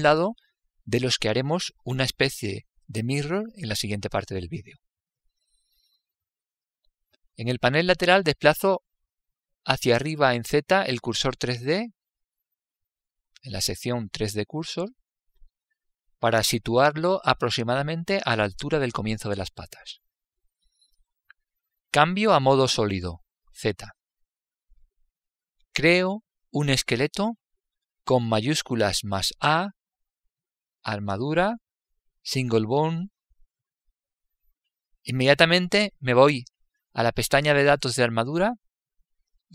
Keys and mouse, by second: 14.1 click, 15.4-20.0 middle drag, 24.1 z, 29.0 shift+a.